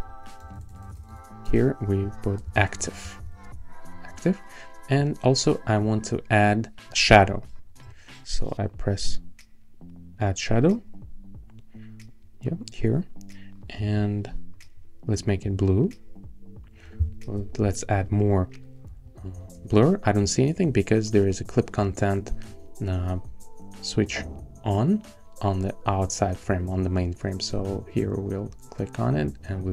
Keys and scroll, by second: 0.0 Right, 0.4-3.7 typing, 17.2 shift+Down, 17.4 shift+Up, 18.9 shift+Down, 19.2 shift+Up.